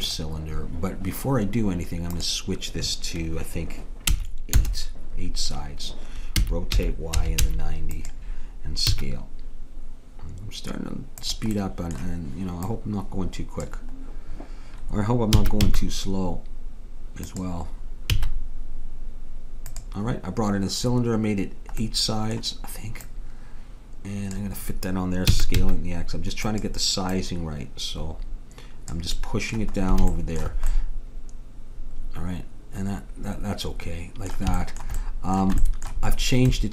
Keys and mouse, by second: 2.2-4.3 drag, 6.4 r, 9.0 s, 11.7 middle click, 12.7-14.5 drag, 14.5-15.5 middle drag, 15.4 s, 18.2 s, 21.9-23.0 middle drag, 23.0-24.9 drag, 25.3 s, 27.1-29.2 drag, 29.2-32.4 middle drag, 34.7-36.7 middle drag.